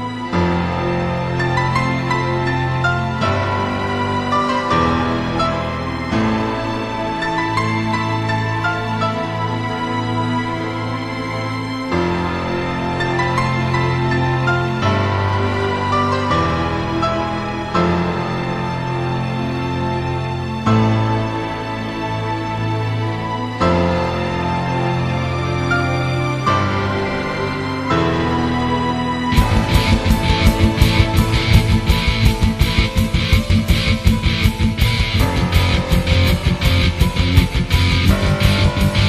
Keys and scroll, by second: 7.5 ctrl+z, 13.1 -, 16.2 -, 28.0 ctrl+z, 29.5 ctrl+z, 32.4 ctrl+z.